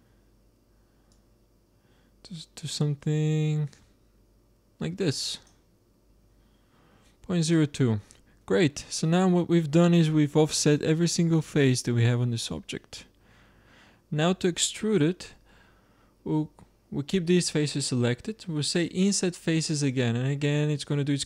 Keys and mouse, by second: 1.0-2.7 drag, 6.9-9.3 middle drag, 9.6 middle click, 10.0-13.7 middle drag, 18.6-20.4 drag.